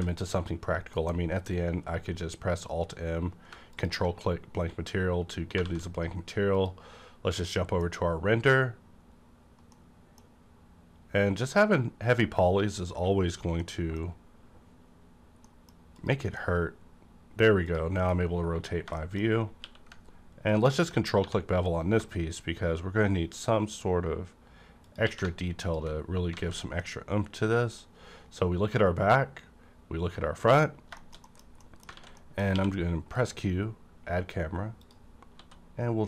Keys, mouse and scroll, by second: 0.9 alt+m, 3.7 click, 5.6 a, 6.5 click, 7.4-9.7 middle drag, 8.4-9.7 scroll up 1, 9.7-13.6 middle drag, 12.1-13.3 scroll up 1, 13.6-16.0 middle drag, 16.0 click, 16.4 middle click, 16.5 middle click, 16.5 click, 17.6 click, 17.9 KP_Decimal, 18.2-18.6 scroll up 1, 18.9 shift+middle click, 19.0 shift+middle click, 19.2 scroll up 1, 19.6 q, 20.5 click, 21.2 1, 24.8 click, 25.0 q, 25.6 alt+click, 26.1 scroll down 1, 26.3 alt+a, 26.8-30.7 middle drag, 30.6-31.6 scroll down 3, 30.9 middle click, 31.2 middle click, 31.6 middle click, 31.9 alt+a, 32.2 middle click, 32.5 q, 33.1 click, 34.8 click, 35.3 s.